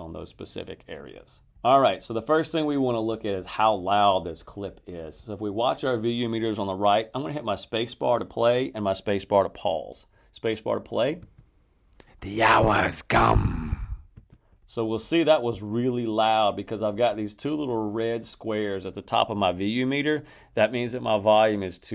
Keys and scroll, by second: 11.1 space, 14.1 space.